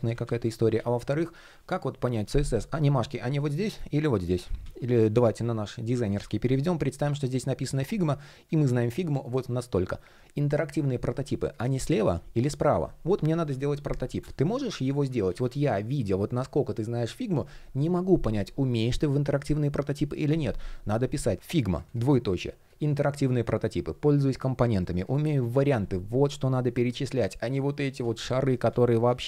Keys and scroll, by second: 0.8 shift+p, 4.2 super+z, 4.6 super+z, 12.8 super+z, 14.8 super+z, 28.2 super+z.